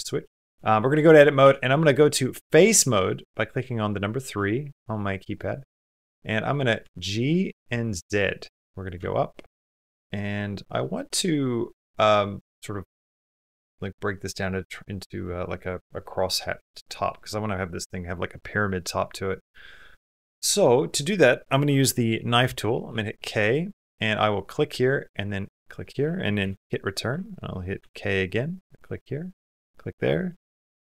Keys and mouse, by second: 0.4 shift+click, 1.2 3, 1.6 click, 2.6 click, 3.4 3, 4.2 shift+middle click, 4.6 middle click, 5.0 middle click, 6.1 middle click, 6.6 g, 8.9 shift+middle click, 9.4 middle click, 9.4 g, 10.6 middle click, 14.6 middle click, 18.9 middle click, 19.3 middle click, 20.2 middle click, 22.6 k, 27.6 k.